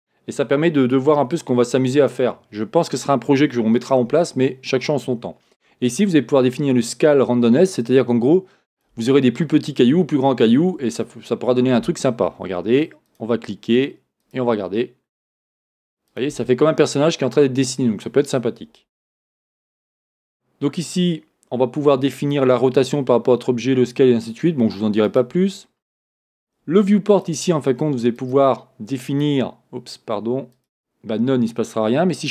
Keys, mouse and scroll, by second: 11.2 scroll down 1, 11.6 scroll up 1, 14.3-16.3 drag, 16.7 scroll down 1, 17.2 scroll up 1, 21.8-23.8 scroll down 1, 25.1-32.3 drag, 25.6 scroll down 1.